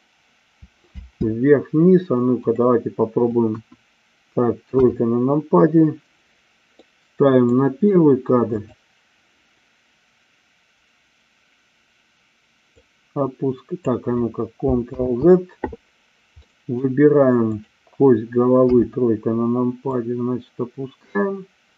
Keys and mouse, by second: 1.0 space, 2.4 click, 3.4 KP_1, 4.6 KP_3, 7.0 middle click, 8.5 click, 12.7-13.9 drag, 15.1 ctrl+z, 16.5 middle click, 17.5-18.6 drag, 18.6 KP_3, 19.9-21.7 drag.